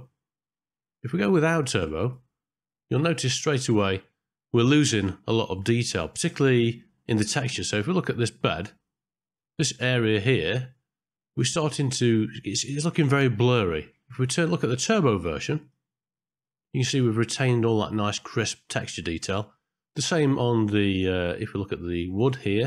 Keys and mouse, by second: 15.7 click, 20.3 middle click.